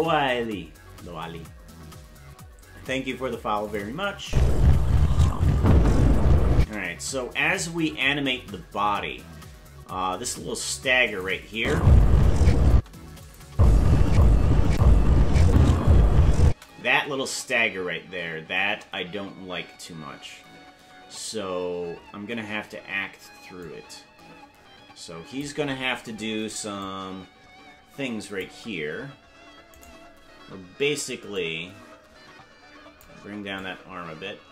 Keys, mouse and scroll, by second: 3.7 click, 4.2 space, 6.5 space, 11.1 click, 11.5 space, 12.7 space, 13.2 click, 13.5 space, 14.1 click, 14.7 click, 15.5 click, 16.4 space, 23.6-25.4 drag, 26.8-28.4 drag, 29.9 right click, 31.3-33.0 shift+drag, 33.5-34.5 drag.